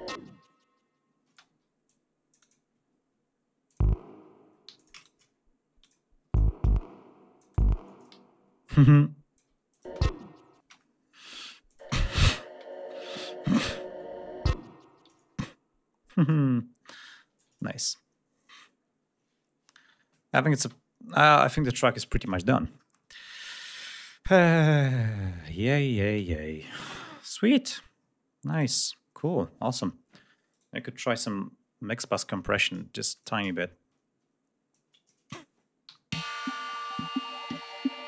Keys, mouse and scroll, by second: 1.2 space, 1.4 d, 1.8 click, 2.7 ctrl+scroll up 2, 3.6 click, 4.5 g, 4.6 shift+click, 4.9 shift+right click, 5.7 e, 6.1 d, 8.1 ctrl+scroll up 2, 9.6 alt+click, 9.8 alt+space, 10.5 space, 10.6-10.9 scroll down 1, 11.5 click, 11.7 space, 12.1 ctrl+scroll down 1, 12.6 ctrl+scroll up 1, 13.2 ctrl+scroll up 1, 15.0-15.3 ctrl+scroll down 1, 15.8-16.2 ctrl+scroll up 2, 17.4-17.7 ctrl+scroll down 2, 18.7-19.0 scroll down 3, 19.6-19.9 scroll down 2, 20.5 space, 20.7-21.5 scroll up 2, 22.6-23.0 scroll down 2, 23.2-24.0 ctrl+scroll up 4, 24.5-25.1 scroll down 4, 25.6 click, 26.8-27.6 ctrl+scroll up 1, 28.4 click, 30.4 right click, 33.0 click, 34.6 click, 35.7 Home, 36.0 space, 36.6-37.0 ctrl+scroll down 1, 37.7 ctrl+scroll down 1.